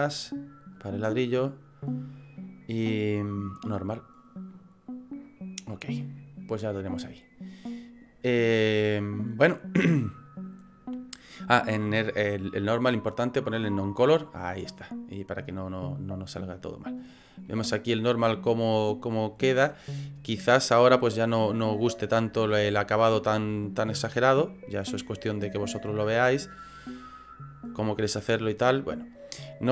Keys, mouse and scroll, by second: 16.0 click, 16.7 middle click, 17.0 scroll up 7, 17.5 middle click, 20.8 middle click, 21.7 scroll up 3, 22.6 scroll down 1, 24.4 click.